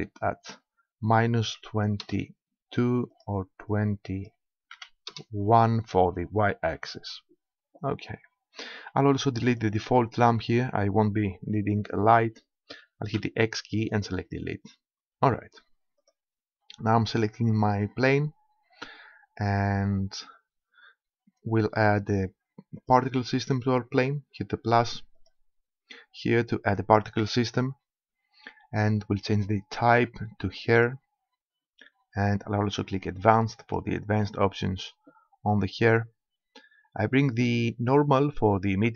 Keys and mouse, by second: 3.1-5.1 drag, 9.5-11.4 drag, 13.2 x, 16.0-17.7 drag, 22.8-24.5 drag, 25.2-27.1 drag, 29.8-31.5 drag, 33.6-35.3 drag.